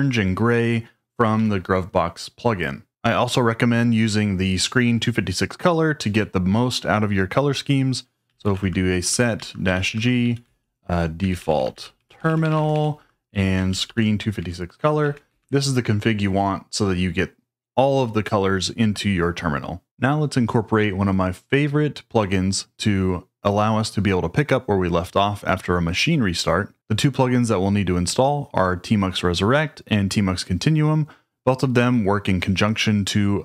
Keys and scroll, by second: 1.3 typing, 8.0-13.1 typing, 13.7 ctrl+g, 13.8 ctrl+g, 14.3 Escape, 14.7-15.7 typing.